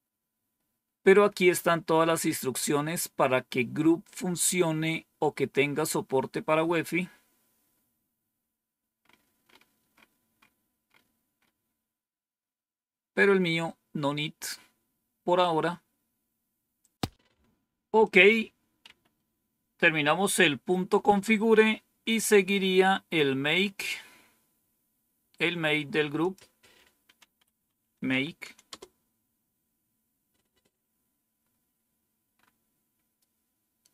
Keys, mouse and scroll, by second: 1.0-1.8 scroll down 1, 2.2-2.9 scroll down 1, 6.6-7.6 scroll down 1, 7.6-8.9 scroll down 1, 8.9-12.0 scroll up 1, 12.0-16.5 scroll up 1, 16.5 scroll up 1, 16.7 click, 17.9 click, 18.8 Up, 21.0 Down, 23.7 scroll down 1, 26.1 click, 26.9-28.5 typing, 28.6 Return, 31.4-32.2 scroll up 2, 32.2-33.0 scroll up 1, 33.0-33.9 scroll up 1.